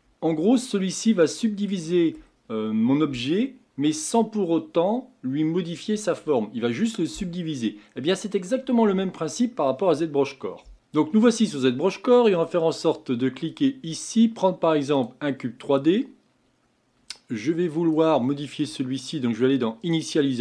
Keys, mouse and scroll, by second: 1.8-4.9 middle drag.